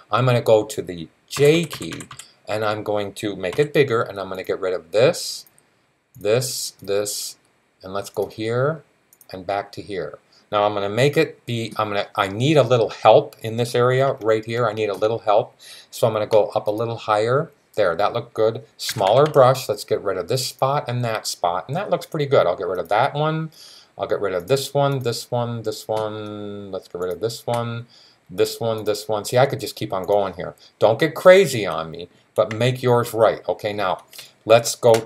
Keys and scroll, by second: 1.2-1.9 typing, 3.3 typing, 18.7-19.0 typing.